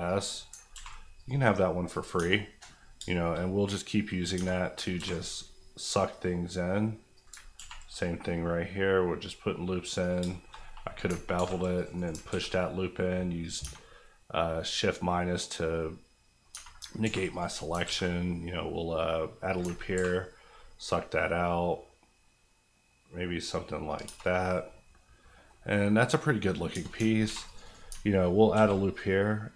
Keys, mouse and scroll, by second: 0.6 ctrl+click, 0.7 ctrl+r, 1.2 click, 2.1 Tab, 2.4 scroll down 1, 2.9 shift+scroll down 1, 3.1 shift+middle click, 3.4 middle click, 4.3 Tab, 4.5-4.9 scroll up 2, 4.9 ctrl+r, 5.1 ctrl+click, 7.3 ctrl+click, 7.5 ctrl+r, 7.9 click, 10.2 shift+click, 10.3 shift+middle click, 10.7-11.3 scroll up 2, 11.3 ctrl+r, 11.7 click, 11.9 right click, 12.1 alt+right click, 12.3 alt+s, 13.4 click, 13.6 Tab, 13.8-14.5 scroll down 2, 14.5 middle click, 15.4 scroll down 1, 15.7 middle click, 16.6 Tab, 17.0 ctrl+r, 17.3 click, 17.5 right click, 17.7 alt+right click, 17.8 alt+s, 19.5 click, 19.6 ctrl+click, 19.9 ctrl+b, 21.3-23.8 scroll up 1, 23.8 click, 24.0 Tab, 24.2 scroll down 1, 24.5 middle click, 25.4 scroll down 1, 26.7 Tab, 27.2 ctrl+r, 27.5 click, 27.6 right click, 28.5 alt+s.